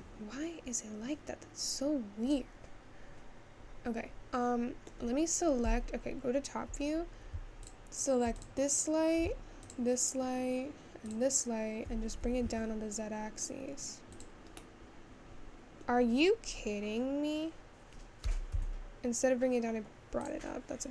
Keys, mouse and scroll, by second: 9.6 click, 13.8 g, 17.3-20.9 scroll down 6.